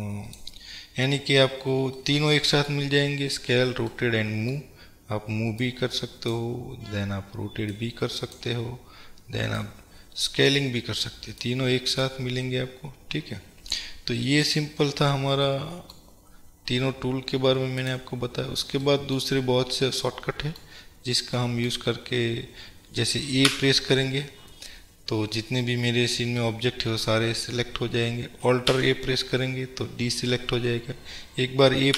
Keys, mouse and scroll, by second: 1.3-2.0 scroll down 2, 2.0-5.7 middle drag, 3.1-4.0 scroll down 2, 5.7-14.7 drag, 14.9-15.5 scroll down 2, 15.5-17.8 middle drag, 17.8 click, 19.0-20.3 middle drag, 19.7-20.1 scroll down 2, 20.9-21.3 scroll up 1, 21.7-23.7 middle drag, 21.9-23.5 scroll up 2, 23.5 a, 25.9-26.5 scroll down 1, 26.9-31.9 middle drag, 27.3-28.7 scroll up 2, 28.7 scroll up 1, 28.8 alt+a.